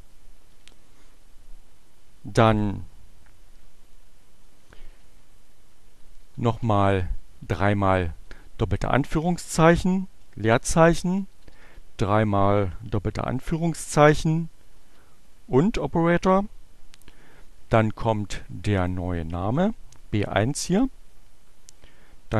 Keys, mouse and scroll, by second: 6.3 shift+2, 9.2 space, 11.2 shift+2, 14.4 shift+6, 18.3-19.3 drag, 22.2 shift+6.